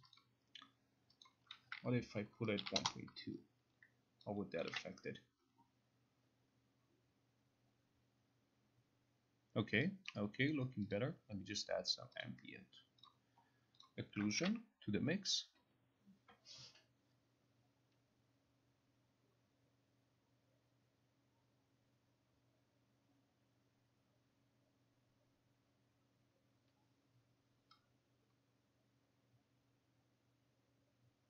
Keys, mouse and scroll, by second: 0.2 click, 1.3 click, 2.3-3.3 typing, 4.8 ctrl+click, 4.8 ctrl+click, 10.2 click, 11.0 click, 12.3 click, 13.2 click, 13.9 click, 14.5 ctrl+r.